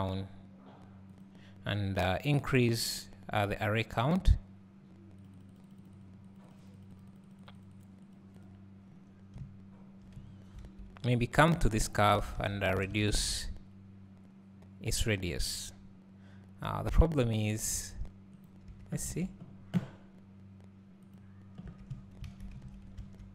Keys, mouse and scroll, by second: 5.5-9.4 drag, 10.8 a, 11.5 click, 12.4 a, 12.9 alt+s, 18.4 right click, 19.2 alt+a, 21.2 click, 22.3 alt+a, 23.0 a.